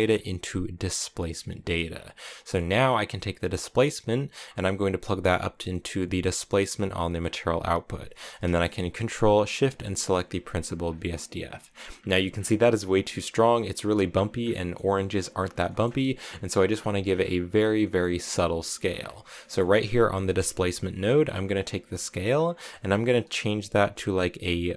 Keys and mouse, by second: 2.2 middle click, 4.4-7.1 drag, 9.5 ctrl+shift+click, 10.4 click, 17.8 middle click, 19.4 middle click, 20.0 click, 22.2-24.7 drag.